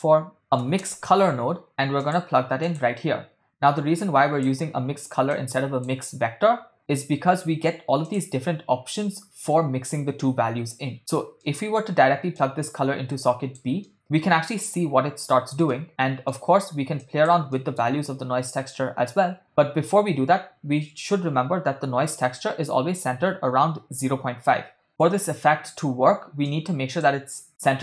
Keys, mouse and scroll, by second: 4.0-4.6 drag, 5.3-6.0 drag, 8.1-11.0 drag, 11.4 middle click, 12.4-13.8 drag, 13.9 middle click, 15.7 middle click, 17.0 click, 17.6 middle click, 26.5-27.0 drag.